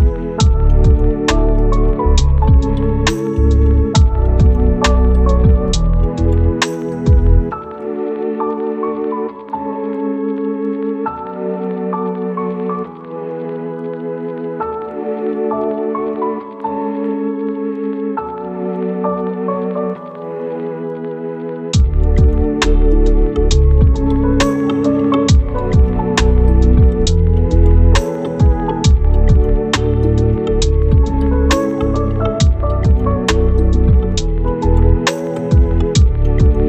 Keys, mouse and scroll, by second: 0.7 click, 5.6 right click, 6.8 click, 7.7 right click, 8.2 click, 8.3-8.8 scroll up 1, 8.8 click, 9.7 scroll down 1, 9.8 scroll up 1, 10.1 click, 11.7 right click, 12.0-13.0 scroll up 1, 13.9 scroll down 1, 14.0 scroll up 1, 14.0 right click, 15.2 scroll down 1, 15.3-15.7 scroll up 1, 15.7 click, 18.0 right click, 18.3 scroll up 1, 18.4 right click, 18.6 scroll down 1, 18.7 scroll up 1, 18.8 right click, 21.2 click, 22.5-24.3 right drag, 24.3 scroll up 1, 24.5 right click, 24.9-25.5 scroll up 1, 25.5 click, 25.6 click, 27.8 scroll down 1, 27.9 scroll up 1, 28.1 right click, 28.5 scroll up 1, 28.6 right click, 29.2 click, 30.9-31.6 scroll down 1, 31.6 click, 31.8 right click, 32.6-33.3 scroll up 2, 32.8 right click, 33.3 right click, 33.6 scroll down 1, 33.7-34.4 scroll up 2, 33.9 right click, 34.4 right click, 35.0 click.